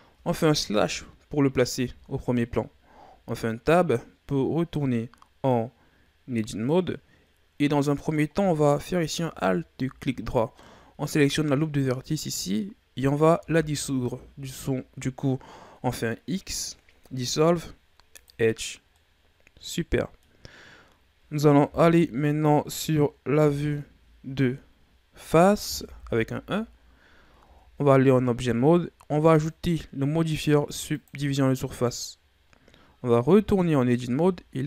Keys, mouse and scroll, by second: 0.6 KP_Divide, 1.8 Tab, 3.0 scroll down 2, 3.3-6.3 middle drag, 6.6-8.7 middle drag, 8.7 alt+right click, 10.5-13.3 middle drag, 13.3 x, 18.9-21.6 middle drag, 21.6 KP_3, 23.4 KP_1, 25.7 KP_1, 27.3 Tab, 29.2-32.2 drag, 33.2 Tab.